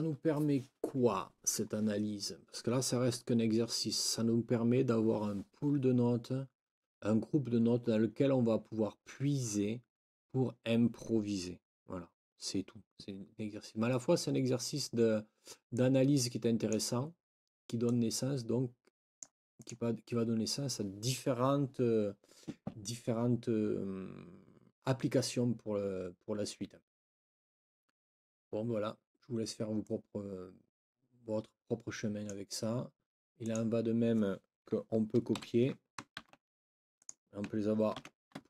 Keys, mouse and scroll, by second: 15.7-16.9 drag, 17.8-19.4 drag, 19.6 click, 29.8 click, 30.1 click, 30.3-32.4 drag, 33.4-34.6 drag, 35.3 shift+End, 36.2 ctrl+shift+c, 37.0 click, 38.0 ctrl+v.